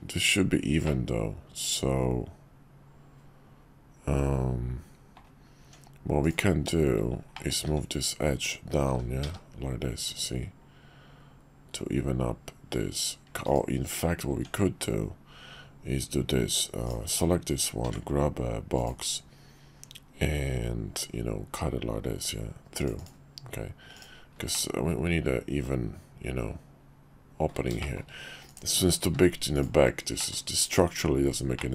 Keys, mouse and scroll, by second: 0.9-5.2 middle drag, 5.6 Tab, 6.2 click, 7.3 middle click, 7.6 `, 8.8 g, 14.3 Tab, 17.8 d, 21.1-23.1 drag, 23.9-24.5 drag, 24.5-27.5 middle drag, 27.8 shift+middle click, 29.0 q, 30.2-31.7 drag.